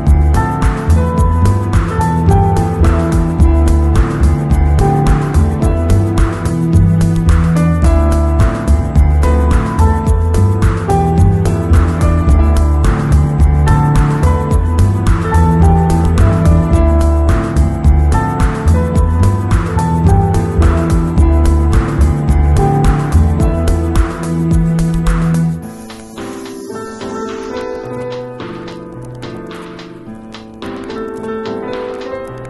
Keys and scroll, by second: 1.0 b, 3.1 ], 5.0 ], 6.1 ], 7.7 ], 11.3 [, 13.6 space, 15.5 space, 18.5 [, 24.4 space, 25.8 ], 31.4 ], 31.9 ].